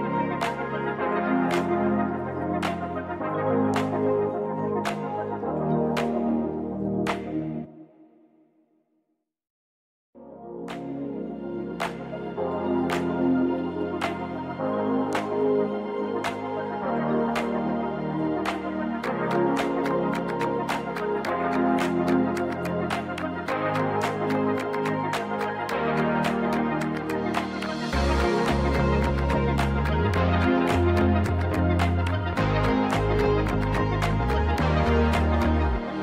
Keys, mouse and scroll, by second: 2.8-5.1 scroll up 3, 5.1 click, 10.3-10.8 scroll down 2, 10.8-14.6 drag, 16.3-17.0 drag, 22.3 click, 24.4 click, 31.3-36.0 drag.